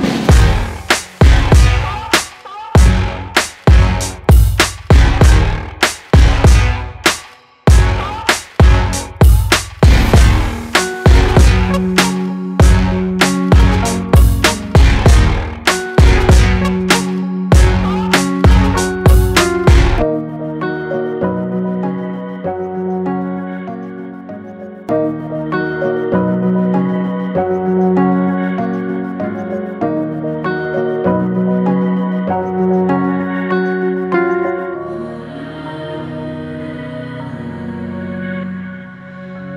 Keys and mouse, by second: 4.0 click, 9.4-9.9 shift+drag, 10.6-11.0 shift+drag, 11.6 shift+drag, 12.3-12.8 middle drag, 14.2 shift+click, 14.9-15.4 shift+drag, 15.9 click, 17.5 h, 20.0-22.1 drag, 25.5 alt+h, 35.0 click, 36.5 click, 38.9-39.5 drag.